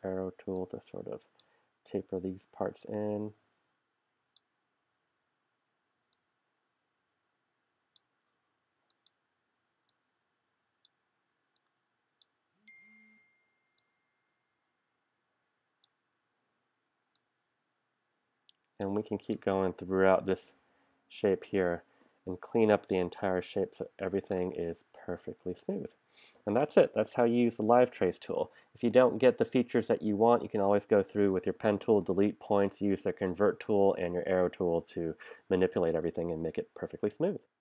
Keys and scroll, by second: 20.6 super+-, 22.7 space, 22.8 space.